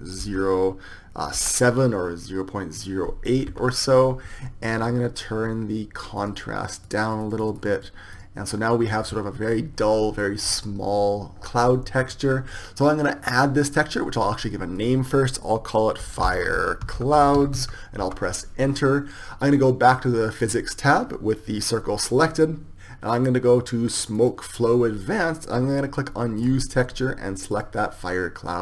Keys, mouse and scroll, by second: 21.7-28.6 drag.